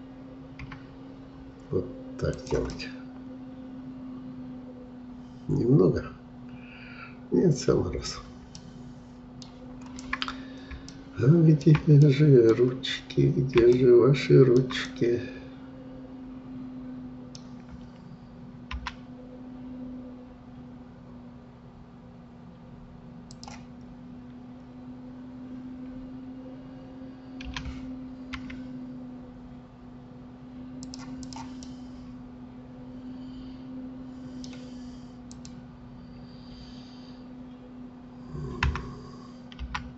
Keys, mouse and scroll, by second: 2.7-5.7 middle drag, 8.1-8.6 scroll down 2, 8.6-9.8 middle drag, 9.8-10.3 scroll up 1, 10.9-12.5 shift+middle drag, 12.5-13.1 scroll up 1, 13.1-13.7 scroll up 2, 13.7-17.8 shift+middle drag, 18.8 g, 23.8-24.6 scroll up 2, 24.6-27.5 scroll down 2, 27.5 r, 31.2 click, 31.6-34.6 middle drag, 35.3-38.3 drag, 38.7 g.